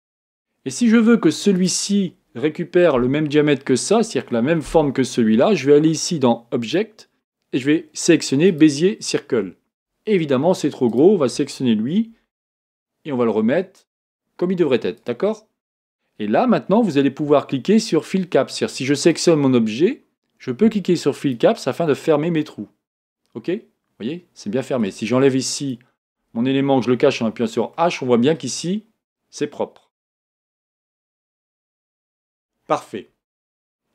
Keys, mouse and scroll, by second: 0.2 s, 1.6 click, 6.6-11.0 drag, 12.0 s, 19.1 click, 21.2 click, 21.9-24.9 middle drag, 25.6 click, 27.7 middle click, 28.3-30.4 scroll up 1, 30.4 scroll up 1, 30.9 z, 32.3 KP_1, 33.6-33.9 scroll down 4.